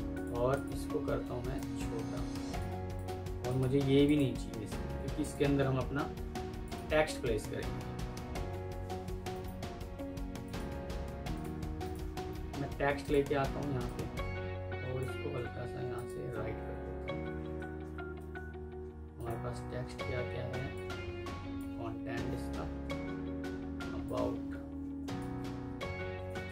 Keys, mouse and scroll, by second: 0.4 double click, 4.8 Delete, 5.3 Delete, 6.5 ctrl+click, 9.2 right click, 15.8 shift+click, 16.5-17.7 typing, 18.1 Escape, 25.5 ctrl+c, 25.6 typing, 26.2 alt+Tab.